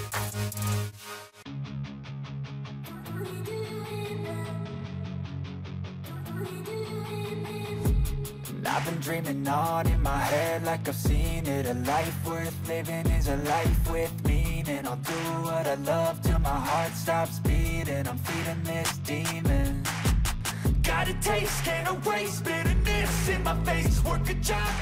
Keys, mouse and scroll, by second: 1.5 scroll down 4, 2.9-3.9 scroll down 11, 12.1-17.5 typing, 17.6 ctrl+a, 22.6 double click, 23.6 double click.